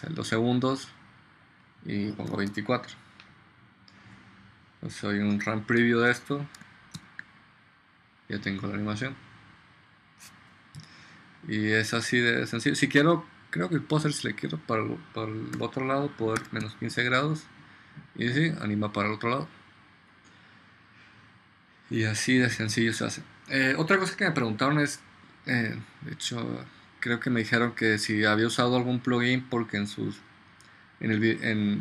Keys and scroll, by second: 2.1-3.1 typing, 7.1 ctrl+0, 16.2-17.2 typing.